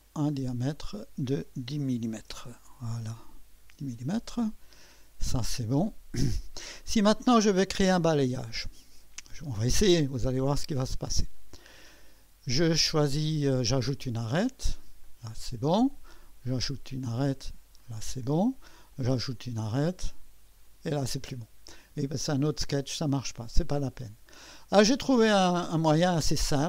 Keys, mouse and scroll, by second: 0.0 click, 0.7 click, 1.8-2.8 typing, 3.6 Return, 4.7 click, 5.9-6.5 drag, 6.9-11.2 drag, 11.3-15.2 drag, 16.4 click, 17.8 click, 18.9 click, 20.6 click, 23.6 click.